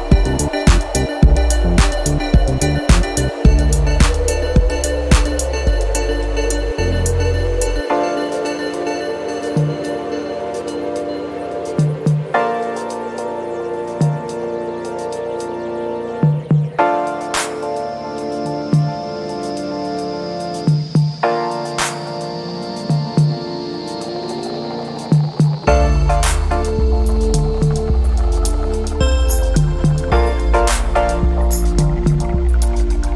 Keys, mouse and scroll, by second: 0.2 5, 1.5-4.1 drag, 4.4-4.9 scroll up 2, 6.1 click, 7.1 1, 10.6 0, 11.9-13.4 typing, 14.3 scroll down 2, 15.1 scroll up 2, 16.1-18.9 drag, 19.7-22.4 drag, 23.7 click, 24.1-26.0 drag, 26.3 click, 26.9 scroll down 2, 28.3 click, 30.1 click.